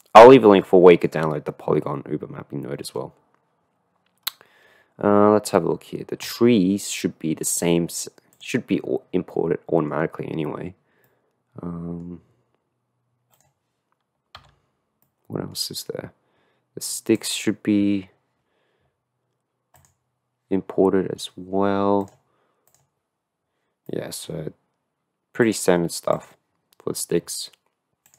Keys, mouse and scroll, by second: 1.0 middle click, 5.1 middle click, 7.3 middle click, 8.3 click, 9.3 click, 11.2-12.2 middle drag, 13.4 click, 14.5 h, 15.4 click, 15.7 middle click, 19.7 click, 22.0 click, 22.6 click, 23.9 middle click, 26.3 click.